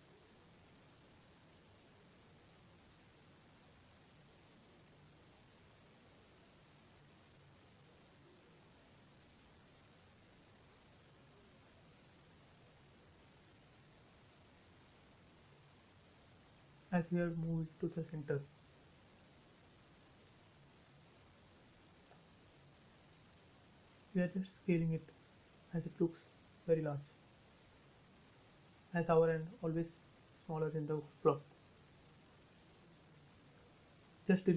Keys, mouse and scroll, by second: 0.5-0.9 scroll up 1, 0.9 click, 1.5-4.3 middle drag, 4.3 m, 4.8 click, 7.1 m, 7.8 click, 9.2 space, 9.7-11.0 middle drag, 11.0 scroll down 1, 14.9 middle click, 16.0 scroll down 1, 16.8 shift+middle click, 17.2 middle click, 17.7 scroll down 1, 18.5 scroll up 1, 19.4 shift+middle click, 20.0 middle click, 21.2 scroll up 1, 21.6 s, 22.7 click, 29.7 click, 29.8 space, 30.2 scroll down 1, 30.9 middle click, 32.1 scroll up 1, 32.7 middle click, 33.2 scroll up 1, 34.4 s.